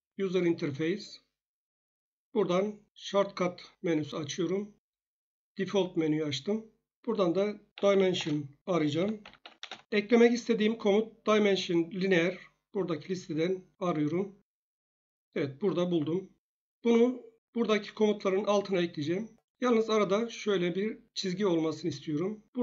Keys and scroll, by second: 7.8-9.7 typing.